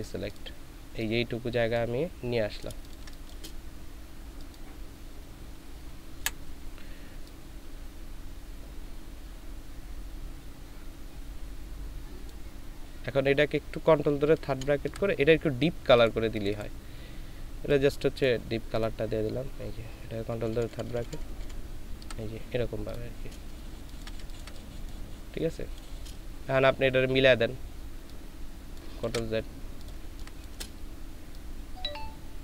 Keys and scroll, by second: 2.9 ctrl+space, 6.2 Delete, 14.5 ctrl+[, 20.5 ctrl+[, 20.7 ctrl+[, 20.8 ctrl+[, 21.0 ctrl+[, 21.4 ctrl+[, 23.7 ctrl+space, 29.0 ctrl+z, 30.0 ctrl+space.